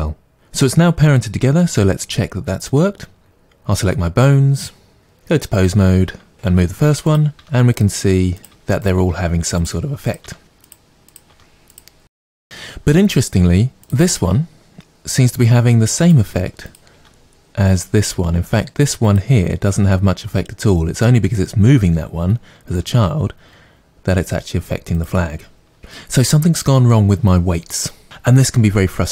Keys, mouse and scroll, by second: 3.2 click, 5.0-6.3 drag, 6.3 r, 7.8 click, 8.2 r, 8.4 click, 8.6 r, 9.2 click, 9.3 r, 9.8 click, 10.5 r, 12.3 click, 12.4 right click, 13.9 click, 14.2 r, 16.1 click, 16.6 click, 16.9 r, 19.1 click, 22.7 r, 25.0 click.